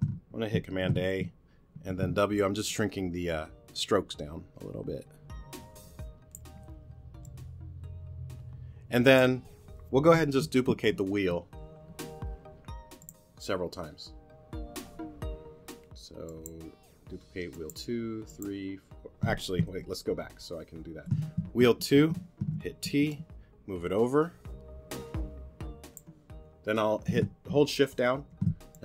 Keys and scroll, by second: 0.7 super+a, 1.8 w, 19.7 super+z, 22.4 t, 23.2 shift+t.